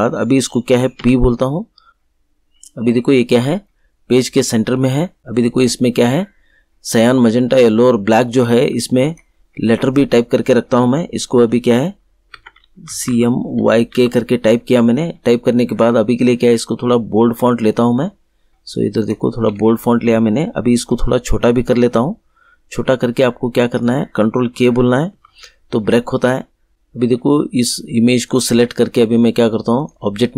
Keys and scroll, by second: 0.9 p, 12.3 Caps_Lock, 12.8 c, 13.0 m, 13.5 y, 13.9 k, 25.1 ctrl+k.